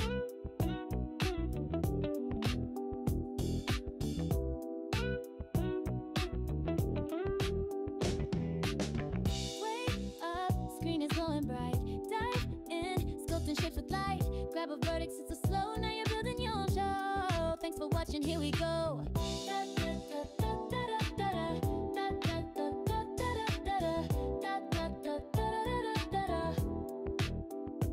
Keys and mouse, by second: 2.9-3.8 drag, 7.1 click, 10.5 click, 14.2 click, 19.9 click, 25.3-25.7 drag.